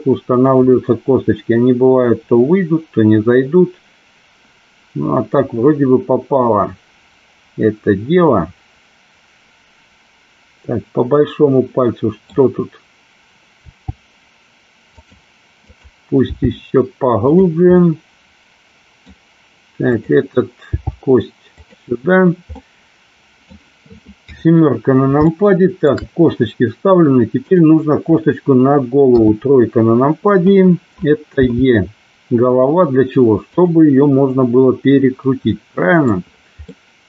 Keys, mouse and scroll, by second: 0.5 click, 0.8-12.4 middle drag, 0.8 scroll up 1, 13.7 g, 14.9 click, 15.8 click, 16.3 g, 17.3 click, 17.8-19.2 middle drag, 19.9 click, 20.8 g, 21.6 click, 22.6 scroll up 1, 22.7 middle click, 24.3 KP_7, 25.3 shift+scroll up 1, 25.4 shift+middle click, 29.2 KP_3, 31.4 e, 32.6 click, 35.5 middle click, 36.7-37.0 middle drag.